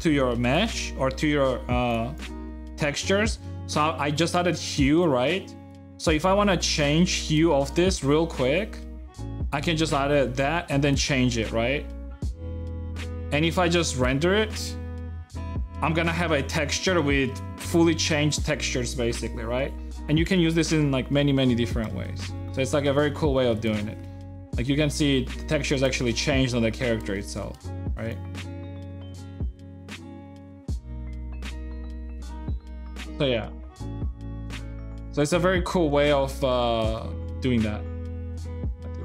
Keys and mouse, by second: 4.8 click, 5.7 middle click, 7.4 shift+click, 8.4-13.6 drag, 13.9 F12, 22.8 shift+middle click, 23.3 middle click, 23.6 shift+middle click, 24.1-25.2 middle drag, 25.7 shift+middle click, 26.9-30.5 shift+middle drag, 30.5-32.1 shift+drag, 32.1 shift+middle click, 32.6-35.4 middle drag, 35.5 middle click, 36.7-38.0 shift+middle drag, 38.2 x, 38.6-39.0 drag.